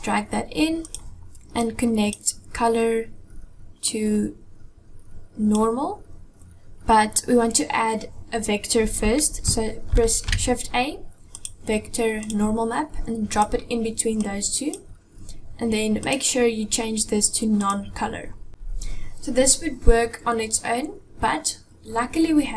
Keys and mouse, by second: 1.4 click, 3.7-5.2 drag, 9.7 shift+a, 14.0 click, 15.9-17.5 drag, 18.5 Delete.